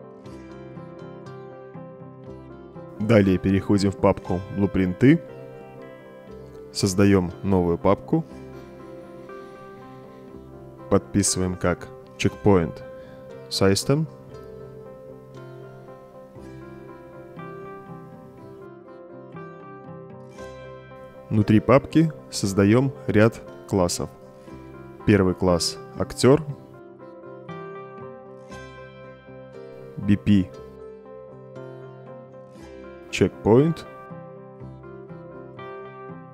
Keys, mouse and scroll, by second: 1.3 middle click, 3.8 click, 5.5 click, 5.7 click, 6.6 right click, 8.4 click, 13.1 c, 14.3-19.4 typing, 22.0 click, 23.9 right click, 25.4 click, 26.4 click, 29.3-30.4 typing, 32.7 c, 33.8 BackSpace, 34.8-36.3 typing.